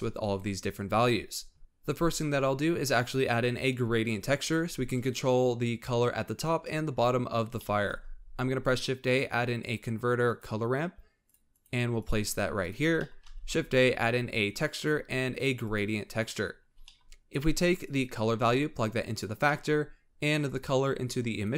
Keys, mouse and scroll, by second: 1.6-4.1 scroll up 1, 7.5 middle click, 7.9 shift+a, 13.0-13.3 middle drag, 13.3 shift+a, 16.5-17.1 scroll up 5, 16.8 middle click, 17.8 click, 19.4-20.4 middle drag, 20.4 click.